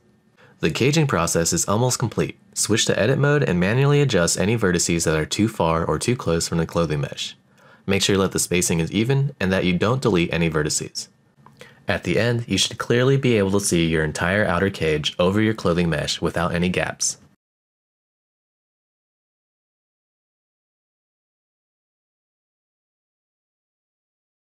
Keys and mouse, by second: 0.6 shift+middle click, 0.9 middle click, 1.1 click, 1.5 middle click, 2.3 click, 3.0 middle click, 4.2-4.9 drag, 6.1 shift+middle click, 6.3 shift+middle click, 6.7-10.8 typing, 6.8 click, 7.4 click, 7.7 shift+click, 7.8 click, 8.0 click, 8.2 click, 8.4 middle click, 8.8 shift+click, 9.0 shift+click, 9.4 right click, 9.6 shift+click, 9.8 click, 9.9 middle click, 10.0 click, 10.2 middle click, 10.8 click, 10.9 click, 10.9 shift+middle click, 11.2 shift+middle click, 11.3 middle click, 11.9 shift+click, 12.0-17.0 typing, 12.1 click, 12.1 middle click, 12.5 shift+click, 12.7 middle click, 13.0 shift+click, 13.2 middle click, 13.4 click, 13.5 click, 13.7 middle click, 14.1 shift+middle click, 14.7 click, 14.8 click, 15.5 click, 15.5 middle click, 15.7 middle click, 15.9 middle click, 16.0 click, 16.1 shift+middle click, 16.2 middle click, 16.4 click, 16.5 click, 16.6 super+z, 16.7 super+z, 17.0 click, 17.1 middle click, 17.3 middle click, 18.8 h, 19.7 alt+h, 21.8-24.6 middle drag.